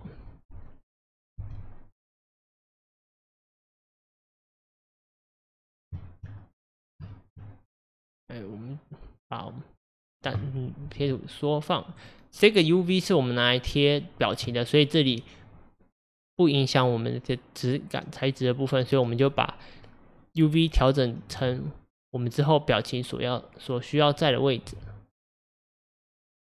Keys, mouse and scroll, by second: 1.4 g, 4.4 click, 5.4 click, 10.0 click, 10.9 g, 13.9 click, 21.4 s, 24.7 g.